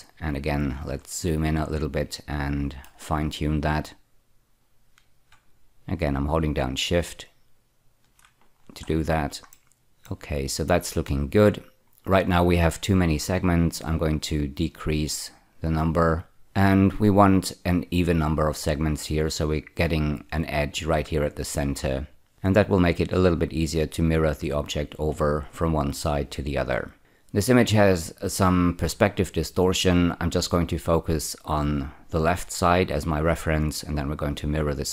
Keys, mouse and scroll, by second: 1.0-2.9 ctrl+middle drag, 4.2-5.2 drag, 8.5-9.2 scroll down 5, 9.5 shift+middle click, 10.0 shift+middle click, 15.5-17.7 drag.